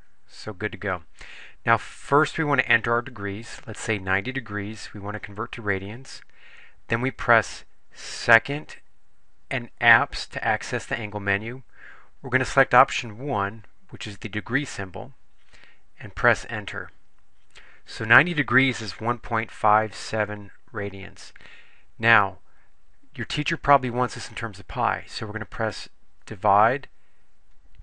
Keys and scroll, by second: 3.9 9, 5.2 0, 13.5 Return, 16.7 Return, 26.3 ÷.